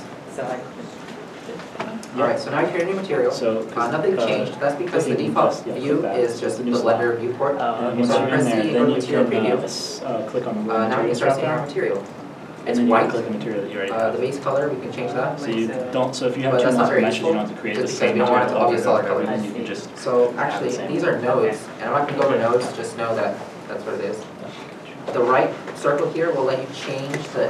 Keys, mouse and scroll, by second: 1.1 scroll down 1, 3.6 shift+middle click, 6.0 middle click, 7.7 z, 9.6 click, 9.8 z, 11.0 middle click.